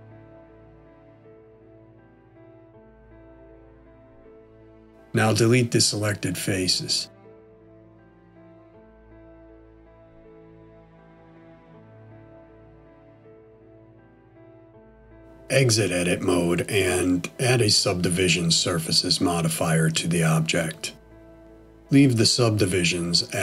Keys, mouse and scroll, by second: 1.7 middle click, 6.6 x, 8.7 middle click, 14.0 Tab, 16.3 click, 19.3 click.